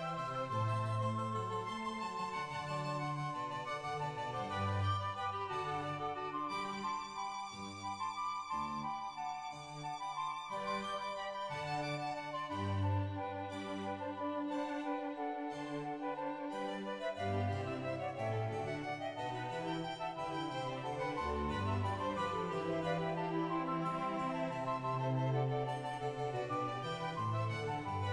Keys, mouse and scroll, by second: 0.7 shift+middle click, 0.7 ctrl+right click, 0.7 scroll up 3, 0.9 scroll down 2, 2.6-3.5 scroll down 2, 2.6-4.5 typing, 3.5-4.2 scroll down 1, 4.2 click, 4.4 Tab, 7.7 ctrl+a, 7.7 click, 8.5 scroll down 2, 8.6 right click, 8.6-9.8 scroll up 2, 9.8-10.7 scroll down 1, 10.7 middle click, 10.7 KP_1, 11.7 right click, 11.7 e, 12.7 ctrl+click, 12.7 right click, 12.7 g, 14.0 scroll up 3, 14.2 click, 14.4 o, 15.3 ctrl+right click, 15.5 ctrl+right click, 15.5 g, 15.7 shift+click, 16.9-17.7 scroll up 2, 17.7 click, 17.7 scroll up 3, 17.9-19.3 middle drag, 19.3-19.6 scroll down 1, 19.9 ctrl+r, 19.9-22.2 scroll up 2, 22.2 right click, 22.2 2, 22.6 scroll down 1, 22.6 1, 22.8 ctrl+right click, 22.8 shift+middle click, 23.0 click, 23.0 e, 23.1 1, 25.0 g, 25.2 shift+middle click, 25.2-26.0 scroll down 3, 25.2 1, 26.0 shift+middle click, 26.7 scroll up 5, 27.0 o, 27.0 g.